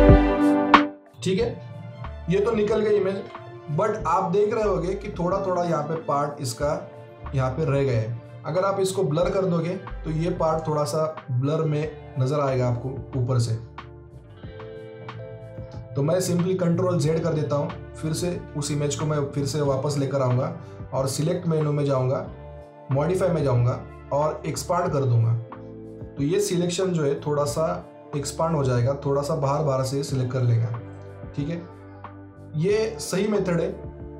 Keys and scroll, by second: 3.1 ctrl+d, 16.9 ctrl+z.